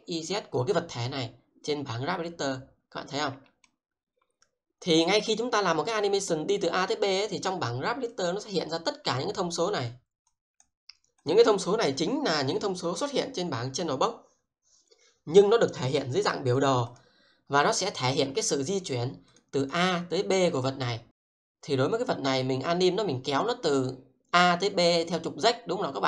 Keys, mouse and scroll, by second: 3.4 alt+middle click, 8.1 click, 16.3 click, 16.9 double click, 19.3 click, 19.6 double click, 23.4 click.